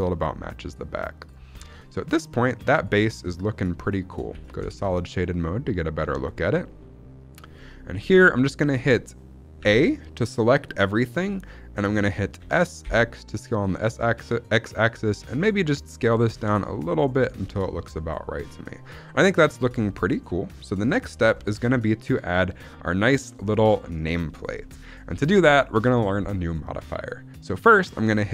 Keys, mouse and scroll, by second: 1.1 click, 1.4 scroll down 2, 1.7 middle click, 2.6 middle click, 4.2 z, 4.6 shift+middle click, 4.8-5.7 scroll up 2, 5.1 middle click, 6.0 scroll down 2, 6.2-8.3 middle drag, 8.4-8.8 scroll up 2, 9.5 a, 12.3 s, 12.7 x, 16.9 click, 17.4 scroll down 1, 17.5-20.5 middle drag, 20.8 middle click, 21.0 scroll up 2, 21.3 middle click, 23.0 middle click, 23.0 scroll up 1, 24.1 scroll down 1, 24.5 middle click, 25.1 shift+middle click, 25.2-26.1 scroll up 1, 26.1-27.2 scroll up 1.